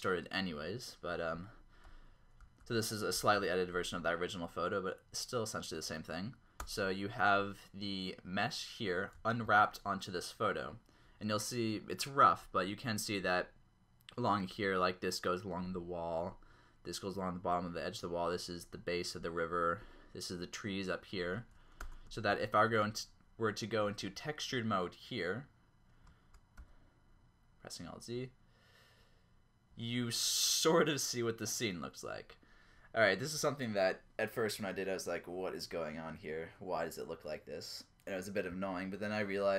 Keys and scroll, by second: 6.6 Tab, 9.4 ctrl+Up, 21.8 Tab, 22.3 ctrl+Up, 26.6 alt+z.